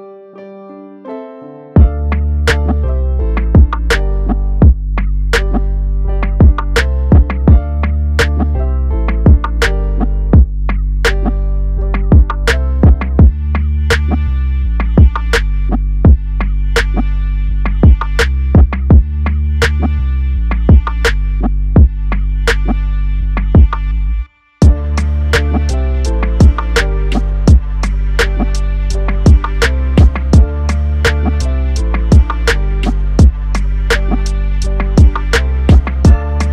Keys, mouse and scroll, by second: 2.4-2.9 drag, 3.9 5, 5.4 click, 7.0 5, 7.5 5, 7.9 5, 8.5 5, 19.1 i, 23.6 click, 29.5 click, 32.0 click, 33.2 g, 34.2 x.